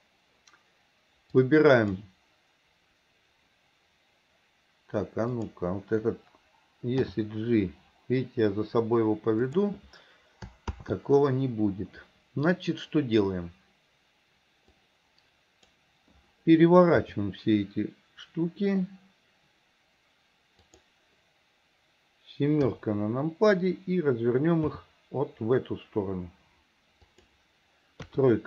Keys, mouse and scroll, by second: 1.5 click, 5.3 click, 7.1 g, 10.8 ctrl+z, 14.8 click, 17.1 r, 22.7 KP_7, 24.7 r, 28.1 KP_3.